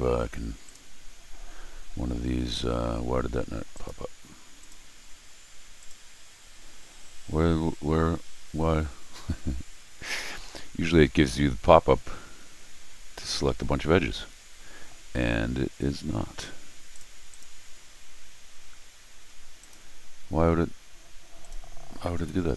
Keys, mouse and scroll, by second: 0.6 click, 3.7 click, 4.6 click, 5.8 click, 10.0 scroll down 2, 16.9 click, 17.3 click, 19.6 click, 21.4 click.